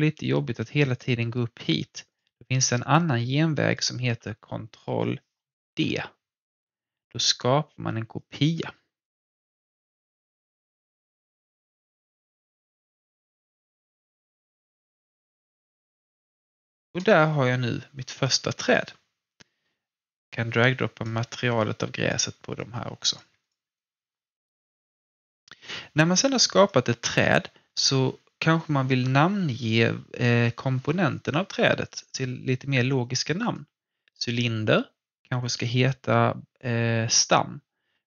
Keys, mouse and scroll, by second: 0.9 click, 5.6 ctrl+d, 7.6-10.8 drag, 10.8-12.3 alt+drag, 12.3 ctrl+d, 13.2-14.7 drag, 14.7-16.8 alt+drag, 17.1-18.9 alt+drag, 18.9 alt+scroll down 1, 20.3-23.4 drag, 22.5 typing, 23.7-33.4 alt+drag.